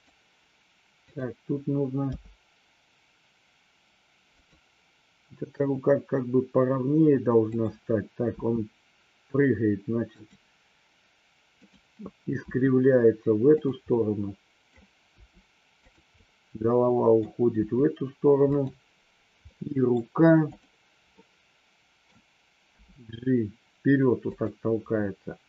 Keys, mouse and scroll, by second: 0.0 click, 2.1 g, 4.4 click, 7.4-7.9 drag, 8.2 r, 11.5 click, 12.4 r, 13.9-14.6 middle drag, 15.1 r, 15.9 drag, 16.1-17.2 middle drag, 18.5 click, 19.5-19.9 middle drag, 20.4 click, 21.1-22.0 middle drag, 22.6 g.